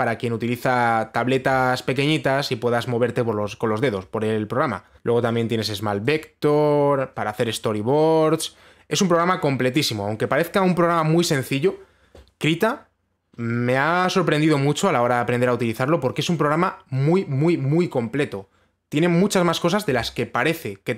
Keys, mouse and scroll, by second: 5.0 click, 6.8 click, 8.4 click, 8.4-9.8 scroll.